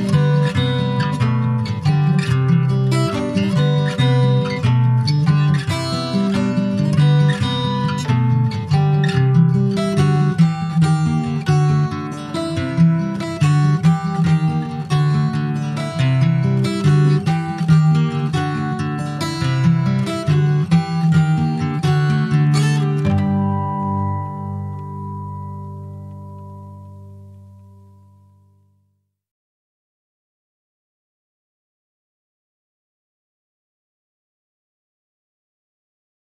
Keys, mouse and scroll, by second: 0.6 click, 0.9 scroll down 2, 1.1 middle click, 1.5 scroll up 1, 1.8 click, 2.0 scroll down 2, 2.2-3.5 middle drag, 3.5 ctrl+s, 5.6-6.1 scroll up 1, 6.1 middle click, 6.5-6.9 scroll up 2, 6.9 middle click, 7.5-7.9 scroll down 2, 7.9 middle click, 8.3 scroll up 2, 8.7-10.1 middle drag, 10.1 scroll down 2, 10.3-11.6 middle drag, 11.6 click, 12.6-13.6 middle drag, 13.6 scroll up 2, 14.3-16.8 ctrl+middle drag, 16.8-17.7 scroll down 5, 17.7-24.4 middle drag, 24.4 click, 24.5-26.5 right drag, 26.5 click, 27.5 click, 29.2 click.